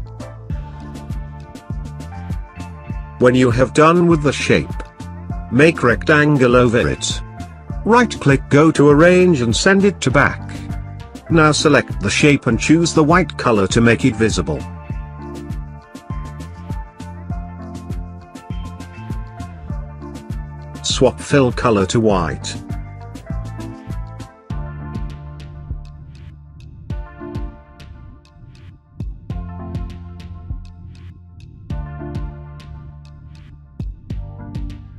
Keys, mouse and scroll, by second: 1.8 ctrl+space, 1.9 ctrl+click, 2.0 ctrl+space, 2.2 click, 3.2-6.7 drag, 6.6 right click, 6.7 right click, 9.1 click, 15.3 click, 17.9 click, 18.0 click, 23.2 click, 23.9-26.2 drag, 26.5 ctrl+click, 26.6 ctrl+space, 26.8 click, 27.6 click, 28.0 ctrl+space, 28.1 ctrl+click, 28.2 ctrl+space, 28.4 click, 28.8 click, 28.9 ctrl+space, 29.0 ctrl+click, 29.1 ctrl+space, 29.2 click, 29.6 click, 29.9 ctrl+space, 30.3-31.5 drag, 31.5 click, 32.2-33.3 ctrl+drag, 33.3 click.